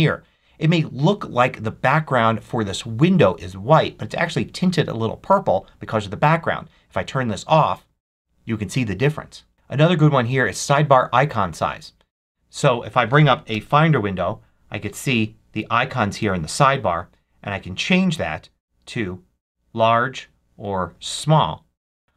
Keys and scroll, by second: 13.4 super+n.